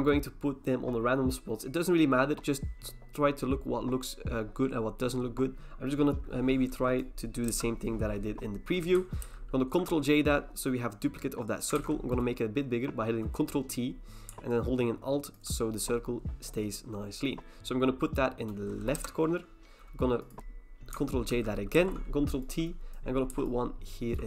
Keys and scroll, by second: 7.5 Return, 9.2 ctrl+j, 11.8 ctrl+t, 18.9 Return, 21.3 ctrl+j, 21.7 ctrl+t.